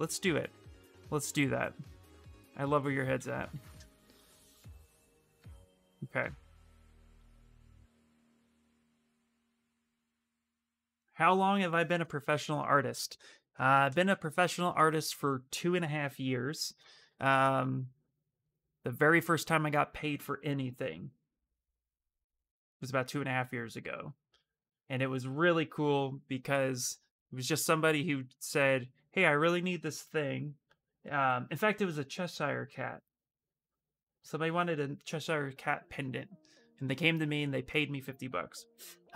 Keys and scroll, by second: 2.9 ctrl+d, 3.3 ctrl+d, 4.5 shift+f, 6.9 s.